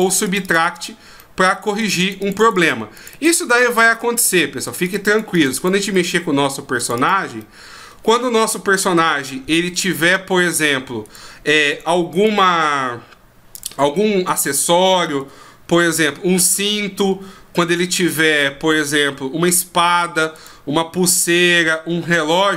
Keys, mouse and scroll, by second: 0.1 click, 0.2 click, 0.4 click, 0.6 click, 1.2 middle click, 1.8 click, 2.0 click, 2.2 click, 2.4 click, 2.6 click, 2.9 click, 3.1 click, 3.5 middle click, 4.6 click, 4.8 click, 5.0 click, 5.3 click, 5.5 click, 5.9 middle click, 6.8 click, 6.9 click, 7.4 middle click, 9.0 r, 11.1 right click, 11.7 right click, 12.1 right click, 13.5 click, 14.5 right click, 15.2 r, 16.5 right click, 17.1 r, 18.3 right click, 18.9 r, 20.3 right click, 21.0 r.